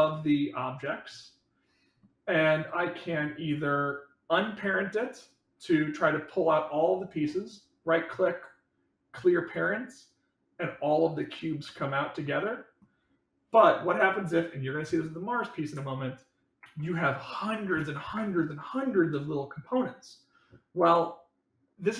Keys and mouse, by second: 0.0-1.9 middle drag, 11.6-12.7 middle drag, 16.6 ctrl+z, 17.8 ctrl+z.